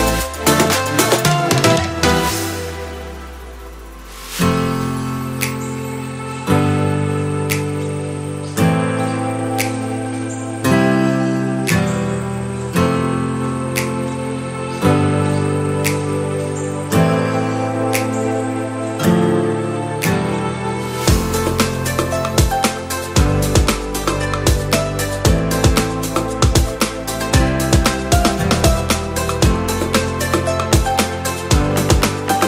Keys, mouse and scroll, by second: 2.8 click, 5.5 click, 10.8-12.7 middle drag, 13.6 a, 14.9-18.1 drag, 19.6-22.7 drag, 23.1-23.7 scroll up 1, 23.7-24.0 middle drag, 23.7-24.0 scroll up 1, 24.4 click, 25.3 click, 26.2 Delete, 28.7 click, 29.6-30.5 middle drag, 30.5 click, 31.3 Delete, 31.8-32.1 scroll up 1.